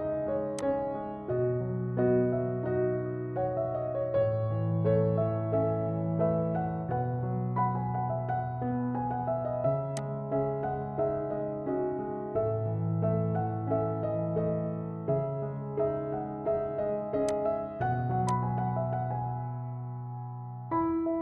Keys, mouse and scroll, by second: 0.7-5.7 shift+drag, 3.4 typing, 5.7 shift+right click, 6.0 typing, 7.3 Left, 7.3 typing, 9.1 Left, 10.3-14.1 shift+drag, 14.8 Left, 16.1 Right, 16.3 click, 17.4-20.7 drag.